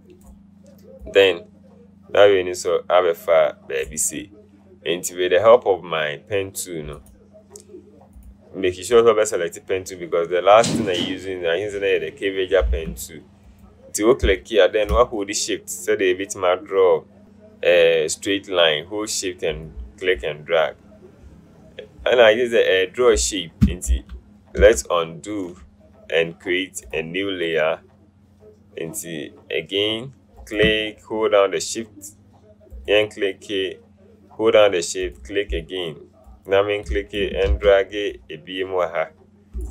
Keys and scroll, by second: 12.9 Caps_Lock, 24.0 ctrl+z, 24.7 ctrl+z, 37.6 ctrl+shift+z.